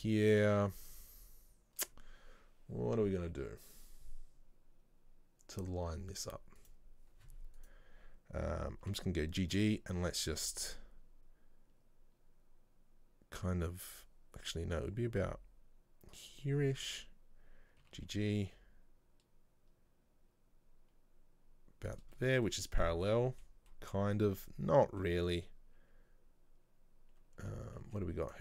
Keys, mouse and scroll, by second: 6.7 right click, 7.7 right click, 9.0 g, 16.9 right click, 17.9 g, 22.3 middle click, 22.6-22.9 scroll down 1, 22.9 a, 23.1-24.2 middle drag, 24.2-24.5 scroll up 1, 24.5-27.5 middle drag, 27.5 a, 28.2 z.